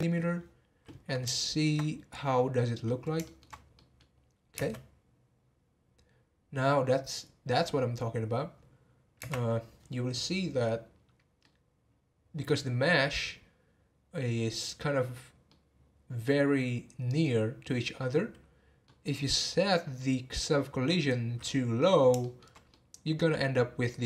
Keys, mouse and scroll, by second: 1.3-2.6 shift+middle drag, 2.6-3.2 scroll down 2, 3.2 shift+middle click, 3.5 scroll up 1, 3.7 middle click, 4.5 space, 9.4 space, 10.9-11.4 scroll up 1, 11.4-14.4 middle drag, 15.4-18.5 middle drag, 19.0-20.5 scroll up 2, 20.5 scroll up 1, 20.8-24.0 middle drag.